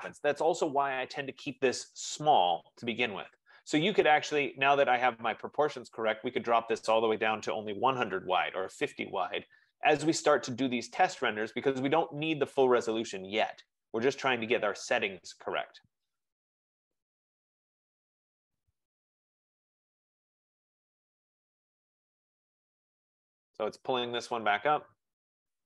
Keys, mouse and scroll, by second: 4.5-7.1 drag, 7.3-7.8 typing, 8.1 Tab, 11.0 click, 11.9 F15.